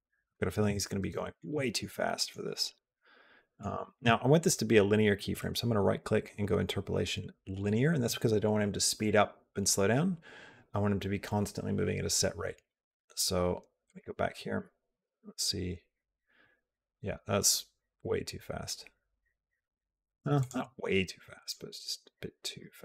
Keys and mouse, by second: 1.1 shift+middle click, 1.4 shift+middle click, 2.8 middle click, 3.7 shift+middle click, 5.3-7.6 right drag, 13.7 click, 14.8 space, 20.1 space, 21.2 click, 22.5 g.